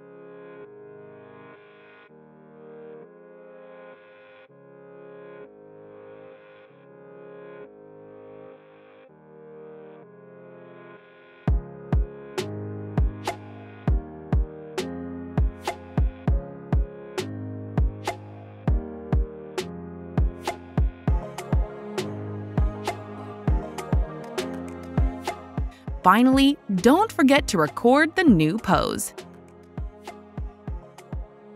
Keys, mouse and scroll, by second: 2.0 click, 3.4 click, 5.3 click, 6.5 right click, 9.6 right click, 9.6 e, 11.8 click, 12.7 click, 13.4 click, 14.2 click, 15.3 click, 16.1 click, 17.1 click, 18.5 click, 20.8 click, 21.9 click, 24.0 click, 25.8 right click, 25.8 s, 27.2 click, 28.4 click.